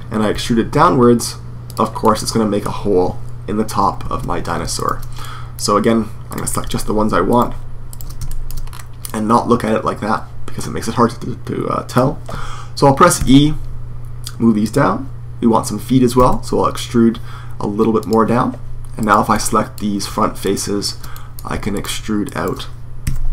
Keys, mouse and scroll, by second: 0.1 e, 1.5-3.6 drag, 3.8 super+z, 4.6-6.6 drag, 6.6 middle click, 6.7-8.1 right drag, 8.1 middle click, 8.9 right click, 9.3-10.7 middle drag, 12.9 e, 15.9 e, 17.9 click, 19.1-22.6 middle drag, 22.6-23.3 drag, 22.8 e.